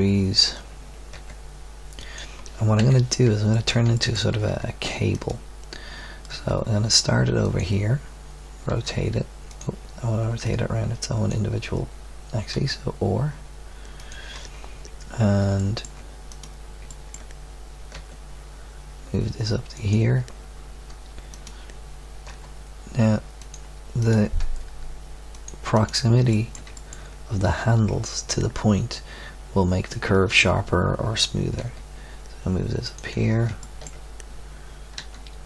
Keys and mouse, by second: 1.1 g, 2.8 KP_3, 4.5 Tab, 6.3 g, 6.5 click, 7.1 middle click, 8.7 r, 10.4-12.5 drag, 12.5 r, 15.6-17.0 drag, 17.9 g, 21.3-23.3 drag, 22.3 g, 24.4 g, 31.6 g, 34.9 r.